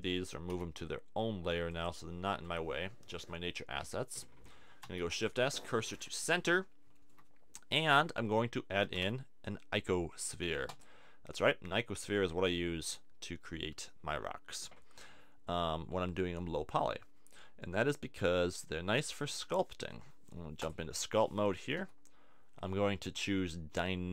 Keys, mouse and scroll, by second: 0.5 m, 4.8 shift+s, 8.9 shift+a, 18.5 click, 21.8 t.